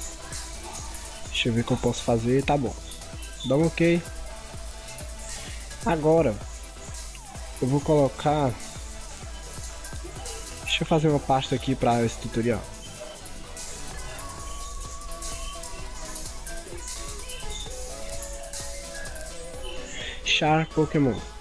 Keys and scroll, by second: 4.6 ctrl+0, 4.9 ctrl+=, 5.2 ctrl+0.